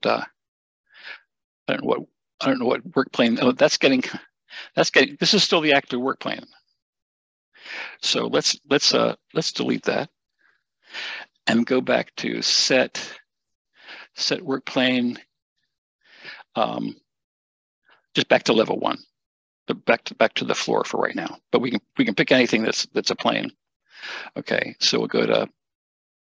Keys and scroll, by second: 0.7 Escape, 1.1 Caps_Lock, 10.4 shift+BackSpace.